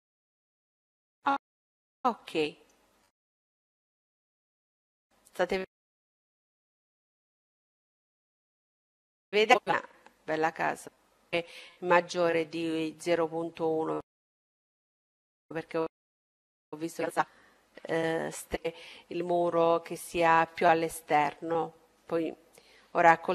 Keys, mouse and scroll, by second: 1.3-3.0 middle drag, 5.3-7.5 middle drag, 8.7-10.3 middle drag, 11.9-15.7 middle drag, 15.9-17.4 middle drag.